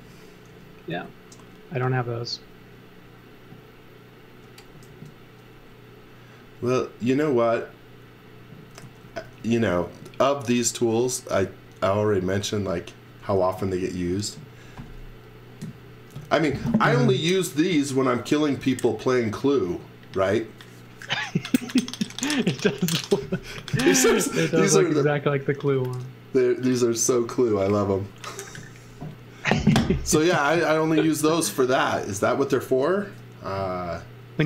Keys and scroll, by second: 0.0-1.0 typing, 4.9 e, 5.9 e, 8.8 z, 9.2 x, 13.4 b.